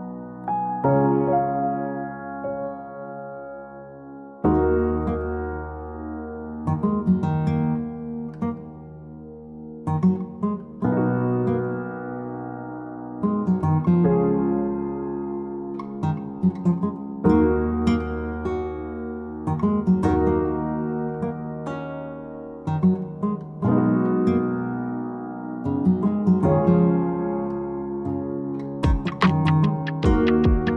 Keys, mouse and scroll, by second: 2.5 click, 4.6 click, 5.7 click, 6.1 Escape, 7.0 click, 8.2 click, 10.1 click, 11.3 d, 12.2 click, 12.3 d, 13.0 click, 13.1 d, 14.1 scroll down 4, 17.2 click, 18.5 click, 20.5 click, 21.6-22.5 scroll, 22.5 click, 25.8 click, 28.1 click.